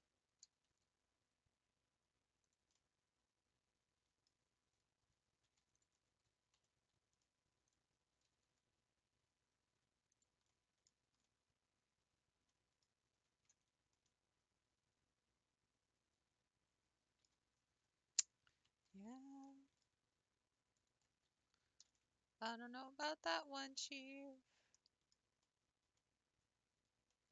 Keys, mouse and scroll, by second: 0.4 g, 0.5 g, 2.8-5.7 middle drag, 5.7 alt+click, 6.6 s, 6.7 s, 7.6 click, 8.2 g, 8.3 g, 10.6 middle click, 10.8 scroll down 4, 11.3-13.2 middle drag, 13.2 Tab, 13.6 scroll down 3, 14.0-17.1 middle drag, 17.2 q, 17.7-18.5 scroll up 1, 18.5 Tab, 18.9 scroll up 2, 19.5-20.7 middle drag, 20.7 alt+click, 21.3 s, 23.7-27.3 middle drag.